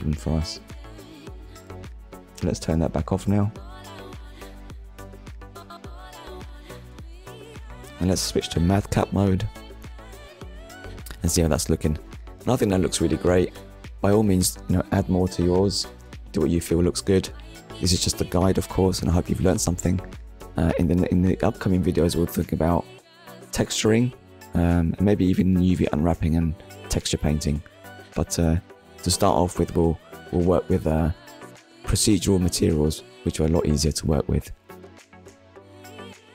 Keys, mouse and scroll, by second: 1.0 click, 2.5 click, 3.5 click, 3.9 shift+middle click, 4.4 middle click, 5.1 shift+middle click, 6.2 click, 7.0 click, 7.7 click, 8.0 middle click, 10.0 ctrl+middle click, 10.8 shift+middle click, 11.4 middle click, 15.5 shift+middle click, 16.0 middle click, 17.4 shift+middle click, 18.3 middle click, 20.6 shift+middle click, 21.5 scroll up 1, 22.9 click, 23.8 shift+click, 24.7 shift+click, 25.9 click, 26.4 shift+middle click, 27.9 shift+click, 29.2 shift+click, 30.2 shift+click, 31.1 shift+click, 31.8 middle click, 33.4 g, 34.2 right click, 34.6 middle click, 35.6-36.0 scroll down 1, 36.1 shift+middle click.